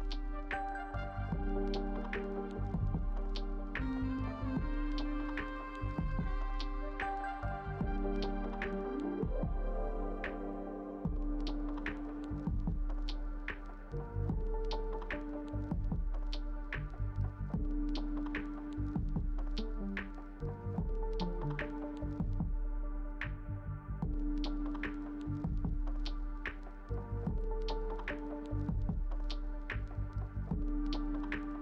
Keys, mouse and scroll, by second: 6.8 Delete.